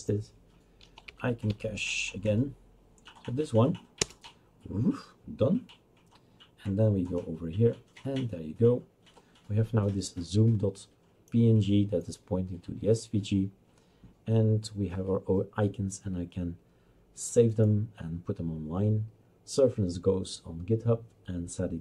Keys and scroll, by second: 1.4 Up, 4.0 Return.